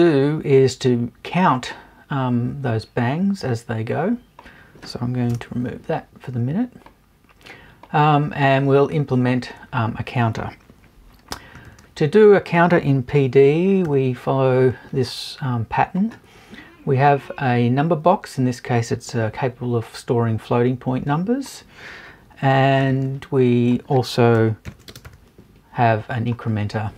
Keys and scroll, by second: 5.3 BackSpace.